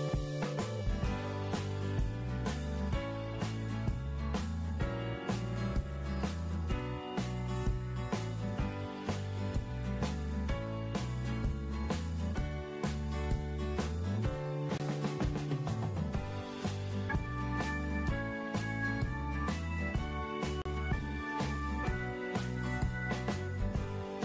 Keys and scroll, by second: 1.0 2, 1.6 0, 11.1 3, 15.4 alt+space.